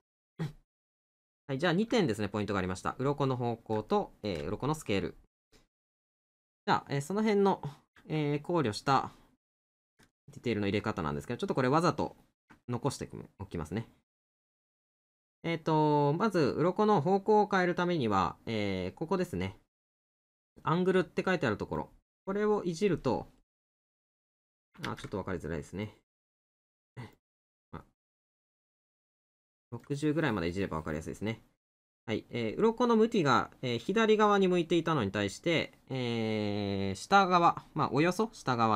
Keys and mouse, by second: 0.9 middle click, 3.9 middle click, 5.8 middle click, 7.5 middle click, 9.7 middle click, 12.7 middle click.